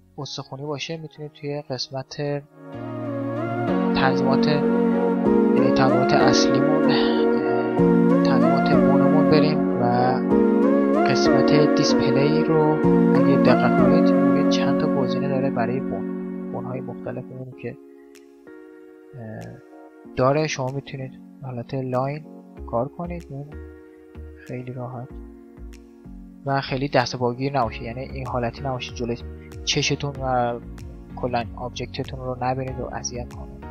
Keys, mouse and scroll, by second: 1.1-5.1 drag, 7.9-10.1 middle drag, 11.1-14.5 middle drag, 14.5 click, 14.9-20.3 drag, 20.3-21.5 middle drag, 21.5-23.2 right drag, 24.2-25.9 right drag, 25.1-27.8 middle drag, 27.8-29.6 drag, 29.6 middle click, 31.7-33.3 middle drag.